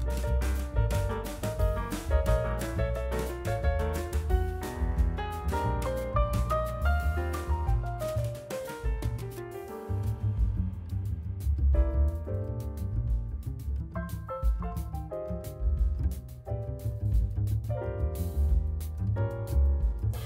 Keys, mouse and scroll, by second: 1.6 e, 3.0 Tab, 3.3-3.6 middle drag, 4.1 right drag, 4.2-4.9 scroll down 1, 4.9 KP_Divide, 5.6 s, 6.5 g, 7.8-8.3 middle drag, 8.3-8.8 scroll up 6, 8.8-9.2 shift+middle drag, 9.2 scroll up 3, 9.5-10.9 middle drag, 10.9-11.5 scroll down 3, 11.6 g, 12.4 scroll down 1, 12.9 scroll down 3, 13.0 s, 13.7-15.2 right drag, 15.5 middle click, 16.3 shift+z, 16.8 KP_7, 17.4-18.0 shift+middle drag, 18.0 g, 19.8 middle click.